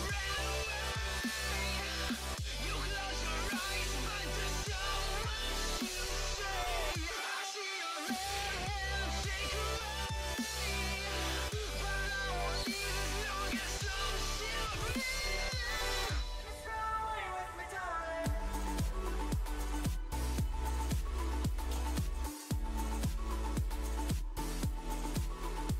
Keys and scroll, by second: 0.4 alt+Down, 0.7 Right, 1.2 alt+BackSpace, 1.7 alt+Down, 2.0 Right, 2.5 alt+BackSpace, 3.1 alt+Down, 3.4 Right, 3.9 alt+BackSpace, 4.5 alt+Down, 4.9 Right, 5.9 alt+BackSpace.